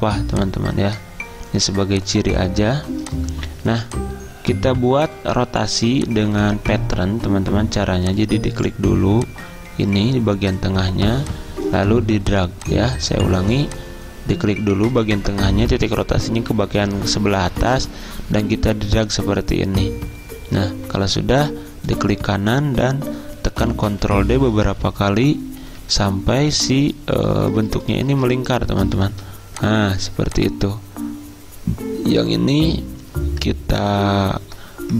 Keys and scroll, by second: 23.6 ctrl+d, 23.8 ctrl+d.